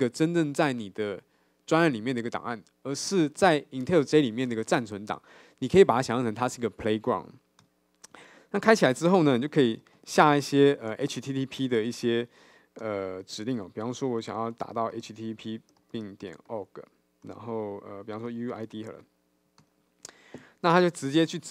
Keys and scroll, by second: 13.0 Return, 19.6 alt+Return.